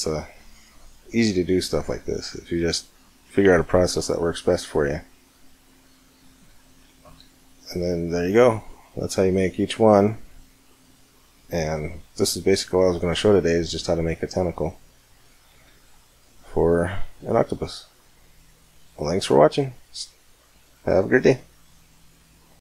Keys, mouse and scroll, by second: 2.8 middle click, 3.3-5.8 middle drag, 6.2-10.7 middle drag, 16.0 middle drag, 16.5-18.6 middle drag.